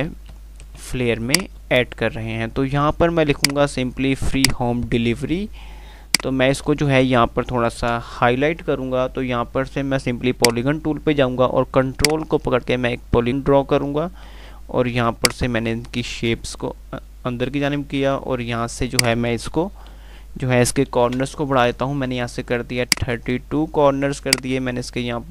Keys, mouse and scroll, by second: 0.8 typing, 1.5 click, 1.9 F3, 3.6 click, 4.9-5.6 click, 5.6 F2, 6.3-7.1 F2, 8.0 shift+Page_Up, 10.4-18.9 drag, 23.1-25.3 drag.